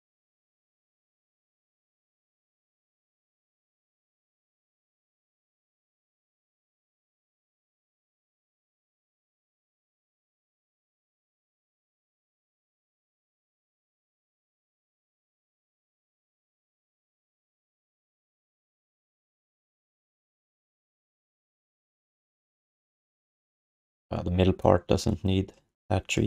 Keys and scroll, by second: 3.0 alt+d, 3.6 alt+q, 6.6 alt+q, 6.7 alt+q, 17.9 q, 18.8 alt+shift+d, 19.0 ctrl+s, 19.9 alt+q.